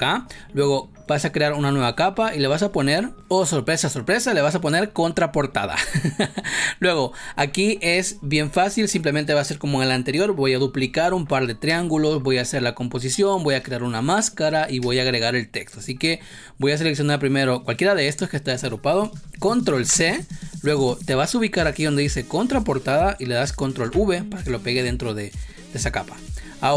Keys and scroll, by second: 11.6 space, 19.7 ctrl+c, 23.7 ctrl+v, 26.0 space.